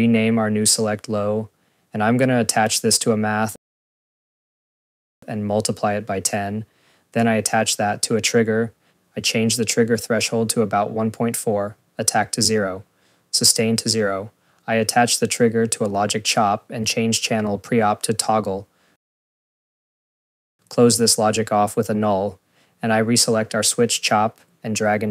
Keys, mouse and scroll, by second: 0.0 click, 2.9 right click, 3.3-4.4 typing, 4.4 Return, 4.7 click, 7.2 Return, 7.6 right click, 8.3 click, 8.5 click, 15.9 Return, 16.4 right click, 18.0 Return, 18.2 click, 18.2 click, 18.5 ctrl+s, 20.7 click, 21.6 right click, 22.2 click.